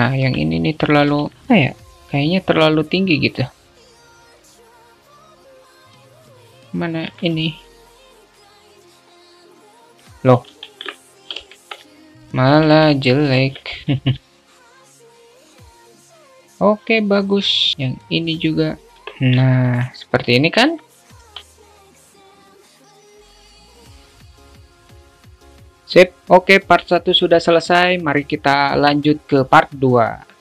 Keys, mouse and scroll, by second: 1.3 alt+z, 2.9 click, 3.8 click, 4.2 Tab, 4.2 alt+z, 4.6 click, 5.3 Tab, 5.4 alt+z, 5.6 a, 6.0 click, 6.5 ctrl+r, 7.3 alt+z, 7.8 ctrl+r, 9.2 alt+z, 9.5 Tab, 9.7-10.5 alt+middle drag, 10.7 ctrl+z, 11.2 alt+middle click, 11.8 ctrl+z, 13.0 alt+middle click, 14.0 a, 14.4 middle click, 14.6 Tab, 14.8 middle drag, 15.1 alt+shift+middle click, 15.4 ctrl+Tab, 15.5 ctrl+r, 16.2 Tab, 16.4-17.8 alt+middle drag, 17.8 ctrl+r, 19.2 Tab, 19.8-21.2 alt+middle drag, 21.4 `, 22.2 middle click, 22.9 Tab, 23.1 alt+z, 23.6 click, 23.7 alt+z, 23.9 click, 24.5 alt+z, 24.6 a, 24.8 click, 25.2 click, 25.6 alt+z, 25.6 Tab, 26.2 alt+middle click.